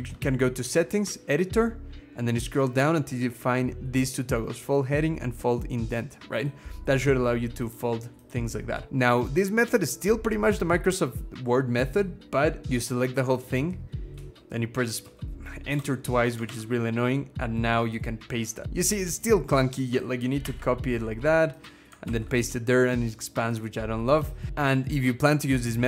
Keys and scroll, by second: 1.4-4.4 scroll down 6, 12.6 ctrl+x, 13.9 Return, 14.8 Return, 15.5 Return, 20.2 ctrl+x, 20.8-21.8 scroll up 1, 21.8 ctrl+v.